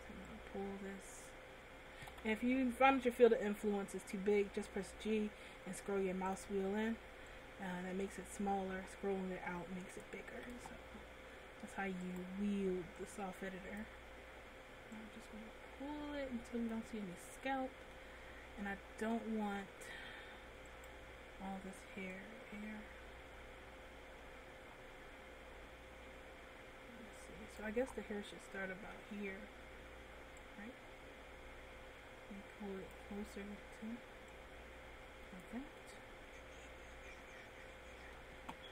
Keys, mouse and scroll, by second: 0.6 click, 2.5 g, 7.7 click, 10.8 ctrl+z, 12.5 right click, 13.3 click, 15.4 click, 17.5 middle click, 18.4 scroll up 2, 19.2-19.7 scroll up 1, 19.7 shift+middle click, 20.9 right click, 22.5 click, 28.1-28.5 scroll down 2, 28.5 middle click, 30.7 click, 34.7 click, 36.1 middle click.